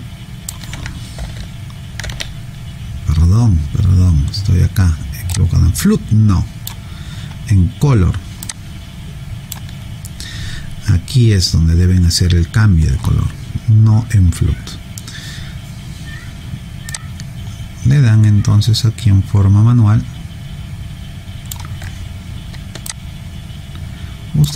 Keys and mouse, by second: 1.2 ctrl+z, 2.0 ctrl+z, 5.3 click, 8.5 click, 16.9 click, 22.9 alt+click.